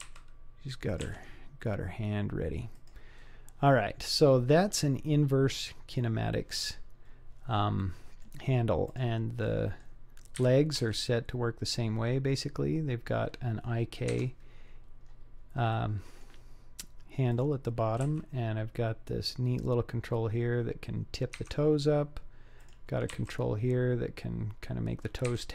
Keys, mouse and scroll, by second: 0.0 r, 1.1 g, 3.7-4.1 scroll up 1, 6.8-7.8 scroll down 2, 7.8-8.2 middle drag, 8.9 click, 9.5-9.8 middle drag, 10.4 KP_3, 10.7 g, 15.0-15.5 scroll up 4, 15.8-16.3 middle drag, 17.3 click, 18.1 r, 22.6 click, 23.2 r.